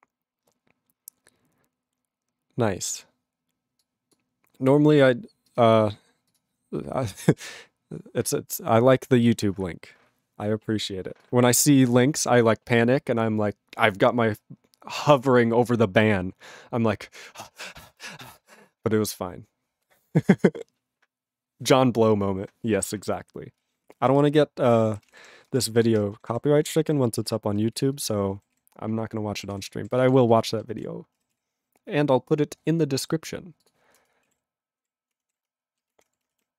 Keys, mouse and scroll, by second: 11.2 click, 11.5 click, 11.9 click, 12.0 click, 24.0 ctrl+a, 24.0 ctrl+p, 24.1 ctrl+space, 24.2-25.0 ctrl+n, 25.1 ctrl+e, 25.2 ctrl+p, 25.5 ctrl+space, 25.9 ctrl+alt+b, 26.0 ctrl+g, 26.3 ctrl+s, 26.6 ctrl+a, 26.7 ctrl+space, 26.8 ctrl+e, 26.9 ctrl+g, 27.2 ctrl+b, 27.7 ctrl+b, 27.8 ctrl+alt+f, 28.3 ctrl+alt+b, 28.5 ctrl+s, 29.5 ctrl+s, 29.7 ctrl+a, 29.9 ctrl+space, 30.0 ctrl+e, 30.0 ctrl+g, 30.3 ctrl+b, 30.8 ctrl+alt+f, 31.3 ctrl+s.